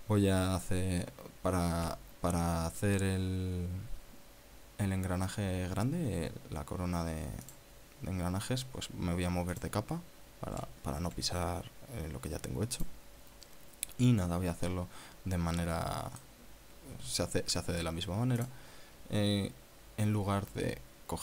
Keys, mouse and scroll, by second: 8.2 click, 10.3 click, 13.6 click, 15.0-15.5 scroll up 1, 16.6 click, 19.2 click, 20.8 scroll down 1.